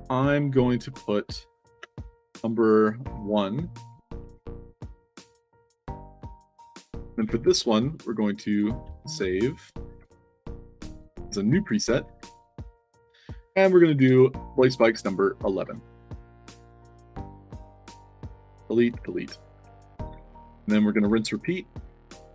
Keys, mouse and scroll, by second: 1.7 space, 2.0 1, 2.3 1, 4.1 ctrl+a, 4.4 ctrl+c, 5.4 click, 6.0 click, 9.0 ctrl+v, 11.8 click, 12.6 click, 13.6 click, 13.9 ctrl+v, 15.6 1, 16.4 click, 17.2 middle click, 18.6 click, 19.6 click, 20.1 f, 21.6 click, 22.2 click.